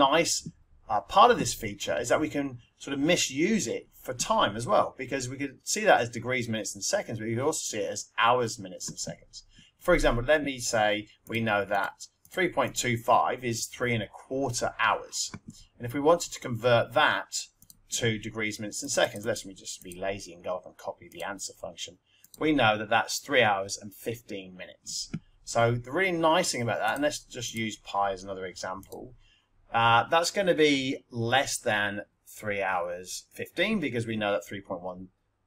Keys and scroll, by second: 11.3 3, 11.6 ., 12.2 2, 12.6 5, 17.5 Return, 18.8 Up, 21.1 Return, 27.5 ^, 28.7 Return.